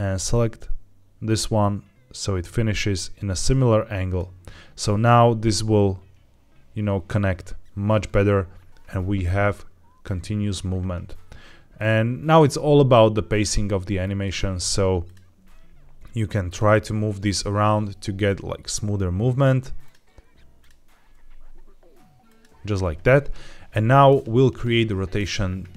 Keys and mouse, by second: 0.2 click, 0.3 click, 11.6 click, 12.3 g, 13.9-15.0 drag, 15.3 g, 16.3-17.3 drag, 17.6 g, 19.7 click, 20.9 g, 22.2-23.9 drag.